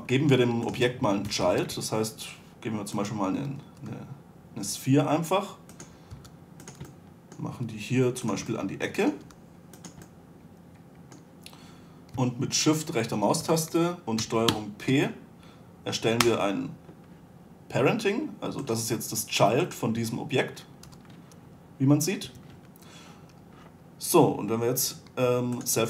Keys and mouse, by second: 1.0 right click, 1.1 a, 1.7 shift+a, 4.1 g, 6.5 s, 8.0 g, 9.6 g, 13.0-14.8 right drag, 14.8 ctrl+p, 19.0-21.9 right drag, 21.2 g.